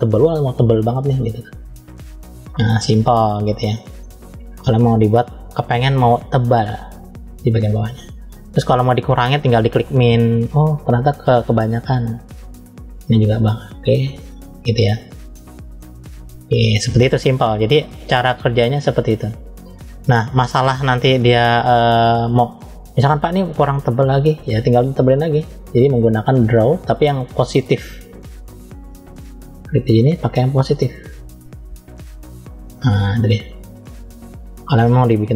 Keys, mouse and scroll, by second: 0.7-1.1 scroll down 2, 1.1 middle click, 2.1 scroll up 1, 3.4-3.8 scroll up 2, 3.9 middle click, 7.1 click, 9.2 click, 10.1 click, 12.8 click, 14.7-15.2 scroll down 2, 15.2 middle click, 16.0 scroll down 2, 16.6 middle click, 17.6 scroll up 1, 18.0 middle click, 18.9-20.1 scroll up 1, 22.0-22.7 scroll up 1, 22.7-23.6 scroll up 1, 23.6 middle click, 24.5 click, 27.9-29.1 drag, 30.2-31.1 scroll up 2, 31.1 click, 33.1 click.